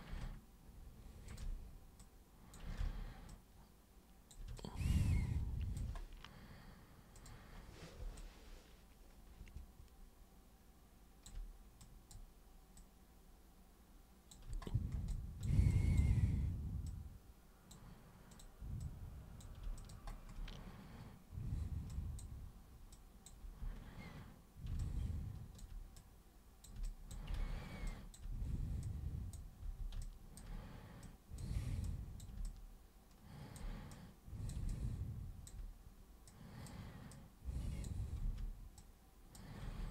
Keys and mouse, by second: 1.3 ctrl+shift+super+click, 2.0-2.5 super+drag, 2.8 ctrl+super+z, 3.3-4.3 super+drag, 4.6-5.8 alt+super+drag, 7.2 super+click, 8.2-11.3 alt+super+drag, 11.8 super+drag, 12.8 super+click, 15.1 alt+super+click, 15.7 super+drag, 16.9 super+click, 18.3 super+click, 18.9 super+click, 19.8 alt+super+click, 21.9 super+drag, 22.9-23.3 super+drag, 23.4 super+e, 24.8-25.6 alt+super+drag, 26.0 super+click, 26.9 alt+super+click, 27.4 ctrl+super+z, 27.9 alt+super+click, 28.4 super+w, 28.9-29.3 super+drag, 29.7 super+e, 30.0 alt+super+click, 31.0 super+click, 31.8 super+click, 32.4-33.6 alt+super+drag, 33.9 super+click, 34.7-35.5 alt+super+drag, 36.3 super+click, 37.1 super+click, 38.2 super+w, 38.8-39.4 super+drag, 39.6 super+e.